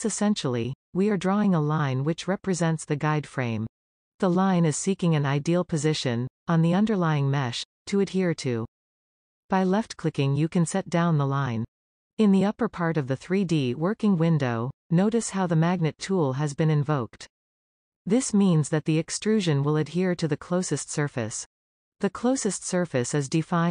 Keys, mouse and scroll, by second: 11.7-14.7 middle drag, 17.3-20.3 middle drag, 22.5-23.7 shift+middle drag.